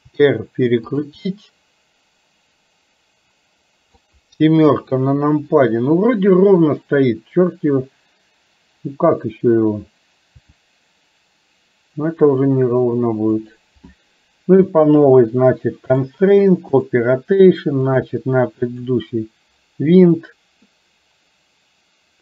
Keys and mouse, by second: 0.2 r, 1.3-4.0 middle drag, 4.8 KP_7, 10.4 r, 16.1 click, 17.9 click.